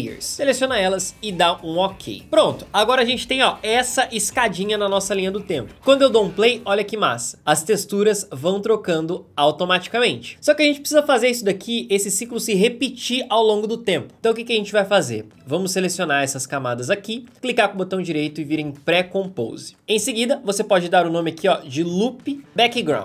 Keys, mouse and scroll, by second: 5.8 space, 21.4-22.9 typing.